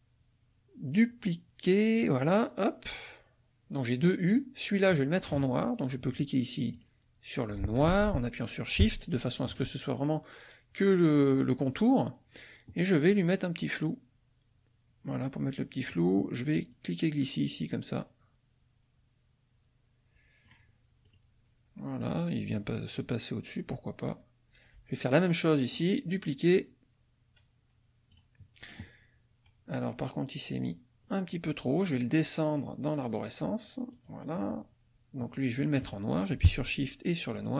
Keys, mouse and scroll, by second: 2.3 click, 4.3 click, 6.7 click, 7.9 ctrl+z, 9.0 shift+click, 16.7-20.6 drag, 21.1 click, 23.0 click, 25.8 right click, 28.1 click, 31.7 click, 32.1 click, 33.9 click, 37.4 shift+click.